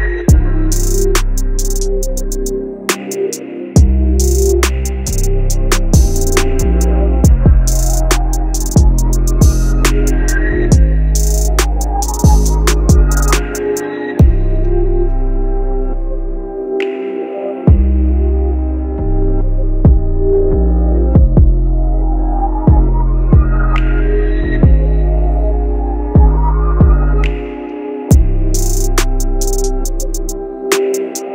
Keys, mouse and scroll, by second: 1.9 click, 2.0-5.5 drag, 9.1 right click, 10.3-12.8 drag, 15.8 click, 17.8 right click, 18.9-23.3 drag, 22.9-23.9 typing, 23.9 Return, 25.4 click, 25.7 typing.